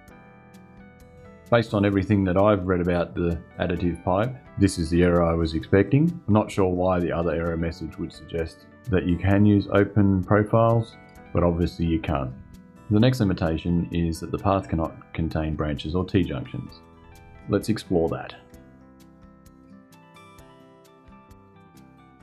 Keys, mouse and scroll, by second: 19.6 click, 20.7 click.